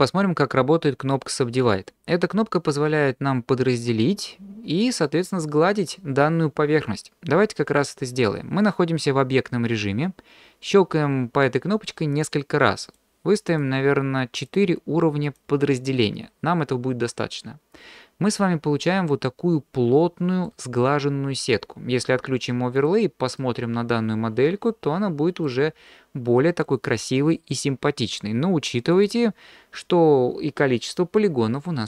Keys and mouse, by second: 13.6 click, 14.3 click, 15.3 click, 18.9 click, 19.1-20.5 middle drag, 22.8 middle click, 23.4-25.4 drag, 23.4-25.4 right drag, 25.4 middle click, 28.9 middle click.